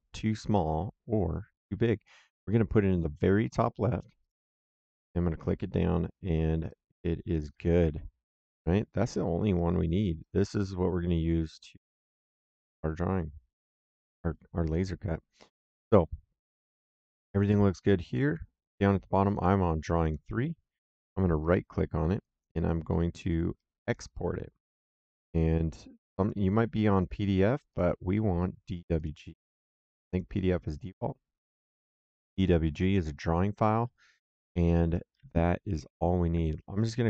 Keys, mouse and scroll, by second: 4.1 click, 6.5 right click, 7.8 Escape, 9.0 middle click, 9.5 right click, 12.3 middle click, 19.2 click, 21.3 right click, 23.7 click, 25.2 click, 27.6 click, 28.9 click, 36.4 click.